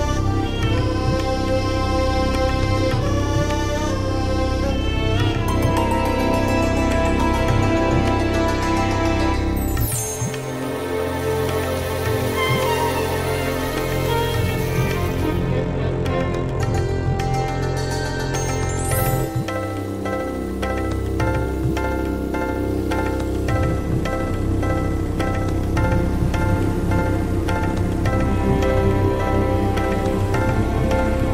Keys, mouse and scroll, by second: 0.1 click, 0.4 click, 1.2 ctrl+scroll down 2, 1.5 ctrl+click, 1.7 ctrl+scroll down 2, 2.8 ctrl+s, 9.7 click, 11.2-13.1 drag, 14.4 click, 14.7 click, 15.0 click, 18.2 click, 19.3 click, 20.5 click, 21.4-22.7 drag, 23.1 click, 24.8 click, 25.8 click, 26.3 click, 27.7-28.8 drag, 29.2 click, 30.2 click.